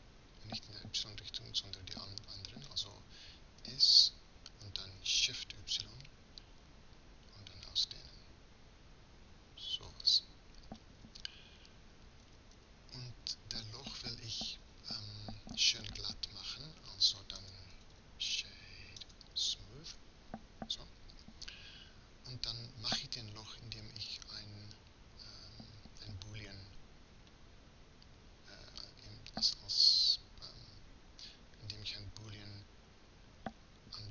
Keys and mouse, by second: 3.7 s, 12.3 a, 12.6 a, 22.5 Tab, 24.2-25.9 drag.